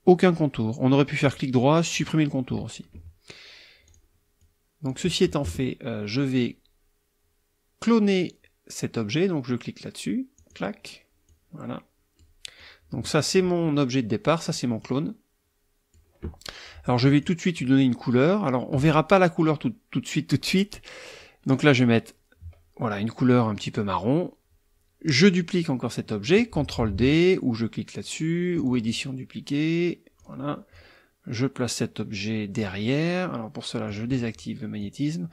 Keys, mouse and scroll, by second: 0.2 click, 1.2 right click, 1.9 click, 3.8 click, 4.1 middle click, 4.4-5.1 drag, 10.4 click, 11.3-12.4 drag, 12.6 click, 14.4 click, 14.8-16.1 drag, 17.2 click, 21.5 click, 28.7 click, 30.2 click, 30.7-32.7 drag, 33.9 click, 34.8-35.3 drag.